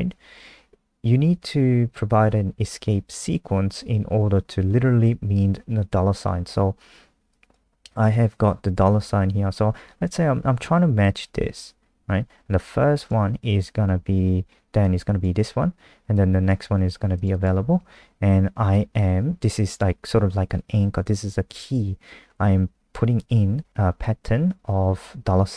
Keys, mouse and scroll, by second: 17.3 click, 18.7 click.